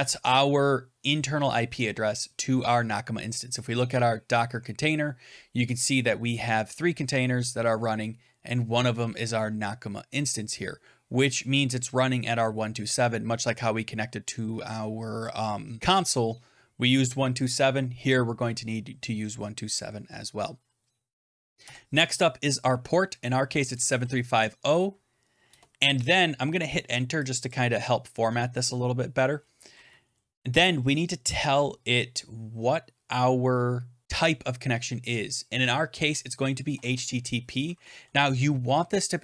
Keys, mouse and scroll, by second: 3.6 click, 5.8 click, 13.4 click, 21.5 typing, 23.2-24.4 typing, 25.4 Return, 27.4 click, 35.9-37.8 typing.